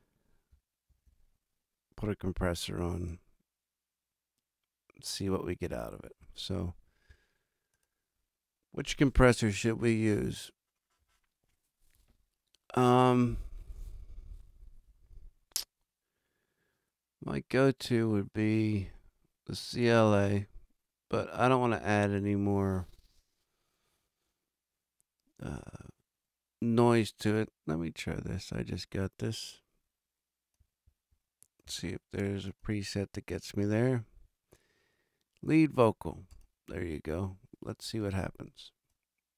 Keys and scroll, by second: 0.9 super+=.